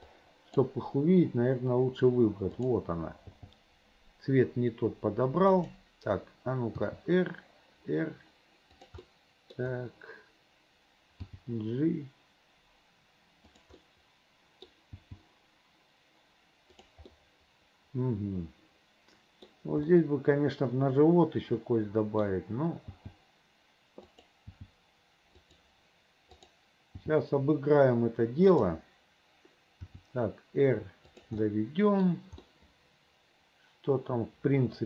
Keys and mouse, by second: 0.3 click, 3.5 g, 6.9 r, 9.2 middle click, 11.4 g, 13.9 middle click, 14.4 click, 14.5 middle click, 15.0 g, 17.3-19.6 middle drag, 20.2-21.6 middle drag, 21.6 click, 23.1 g, 24.6 g, 26.4 click, 27.1 g, 30.0 r, 31.6 click, 32.6-34.8 middle drag.